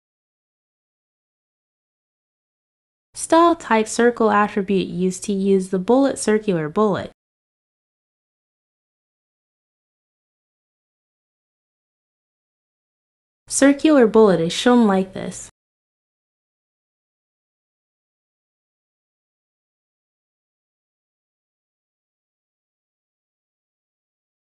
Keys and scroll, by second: 12.0 ctrl+s.